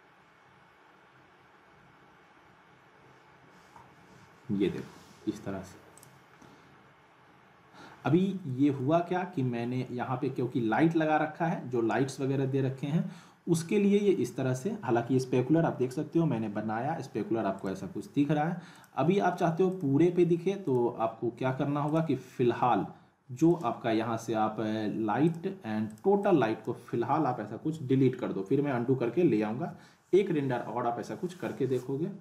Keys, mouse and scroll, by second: 6.0 click, 6.3 scroll up 1, 8.5 middle click, 9.3 scroll down 1, 17.6-26.8 drag, 29.5 click, 29.6 q.